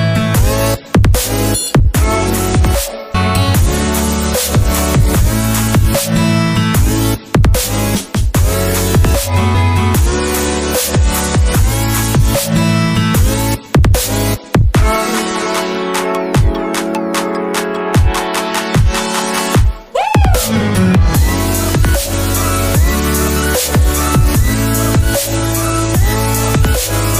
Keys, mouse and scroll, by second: 6.8 alt+Tab, 16.5 middle click, 16.6 right click.